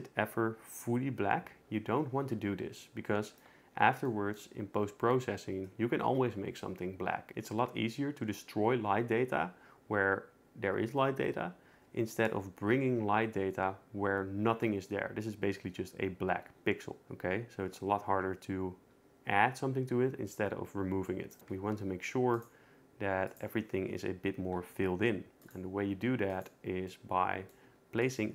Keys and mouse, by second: 21.3 shift+right click, 21.4 shift+a, 23.3 click, 24.6 r, 25.7 g, 26.3 click, 26.9 middle drag, 27.7 g.